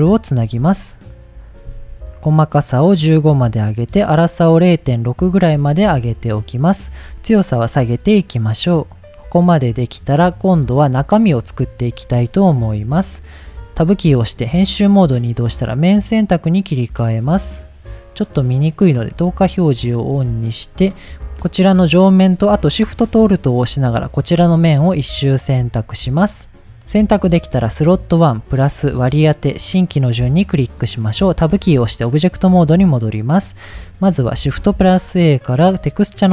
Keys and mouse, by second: 0.4 ctrl+s, 2.2 click, 3.2-4.6 drag, 5.8 shift+middle click, 7.0-9.0 drag, 12.8 click, 13.8 Tab, 15.4 click, 16.2 middle click, 27.2-29.3 drag, 29.7 click, 31.6 Tab, 32.9 middle click, 34.5 shift+a.